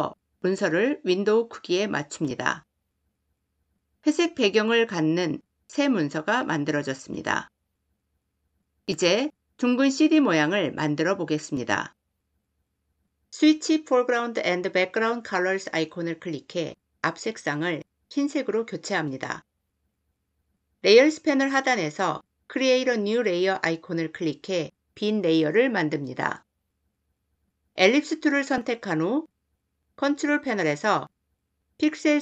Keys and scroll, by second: 13.2 x.